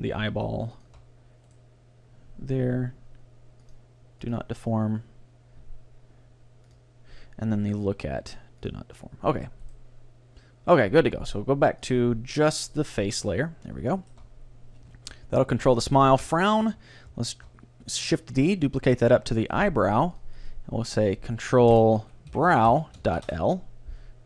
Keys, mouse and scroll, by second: 1.5-3.4 right drag, 3.7-6.2 drag, 4.8-6.0 middle drag, 6.7-8.6 drag, 7.7-9.6 right drag, 8.8-10.6 drag, 9.8-11.6 right drag, 10.8-12.8 middle drag, 11.9-14.6 drag, 13.6-15.7 middle drag, 16.1-16.4 scroll down 1, 16.4-18.4 middle drag, 17.4 shift+d, 20.2-22.2 drag.